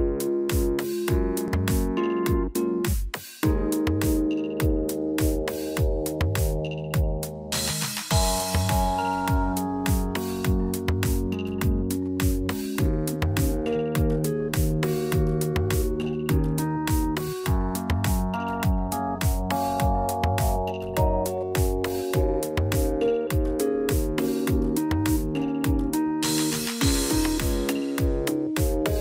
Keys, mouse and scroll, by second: 0.3 click, 0.7 shift+click, 1.8 shift+r, 2.4 middle click, 3.6 scroll down 2, 3.9 middle click, 6.8 click, 7.8 middle click, 8.6 p, 9.5 Tab, 9.8 click, 14.5 click, 14.5 scroll down 1, 15.3 click, 15.3 scroll down 2, 17.3 middle click, 18.0-18.5 scroll up 2, 18.2 Tab, 18.5 middle click, 19.7 click, 20.8 shift+middle click, 21.1 middle click, 21.9 shift+click, 23.1 j, 23.5 middle click, 24.5 click, 25.2 middle click, 25.9 shift+click, 27.1 j, 27.5 middle click, 28.0 Tab, 28.4 middle click, 28.9 scroll down 1.